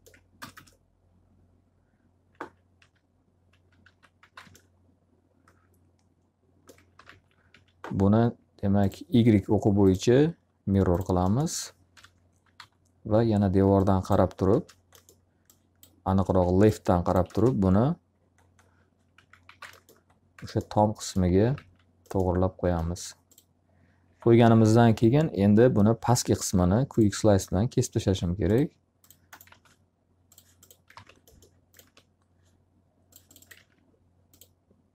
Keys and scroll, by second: 0.3 ctrl+space, 2.7 w, 3.8 x, 4.2 z, 4.4 alt+a, 6.6-7.9 typing, 11.4 l, 12.5 z, 14.4 space, 16.2 s, 17.2 space, 19.1 x, 19.4 z, 19.6 alt+a, 21.4 z, 27.5 s, 29.4 alt+a, 30.8 alt+r, 33.4 alt+a.